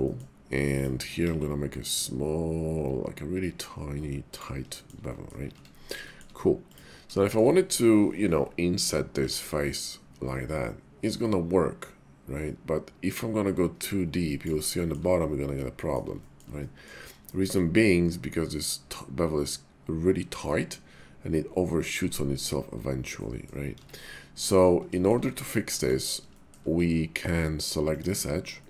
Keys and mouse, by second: 0.0 middle click, 0.7 click, 1.2 ctrl+b, 4.3 click, 4.7 shift+middle click, 5.1 middle click, 5.4 Tab, 6.1 shift+middle click, 6.5 click, 7.1 shift+click, 14.3 click, 14.7 shift+middle click, 15.6 middle click, 16.1 shift+middle click, 16.6 middle click, 17.2 shift+middle click, 23.1 middle click, 23.8 Tab, 24.9 shift+middle click, 25.3 click, 25.7 middle click, 26.3 shift+click, 27.8 click, 28.5 shift+click.